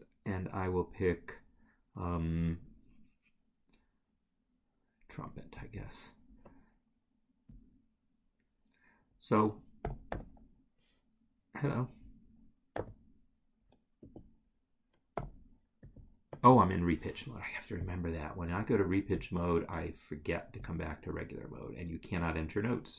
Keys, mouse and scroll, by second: 5.6 click, 5.8 double click, 9.8 n, 12.7 d, 14.4 Escape, 17.8 click.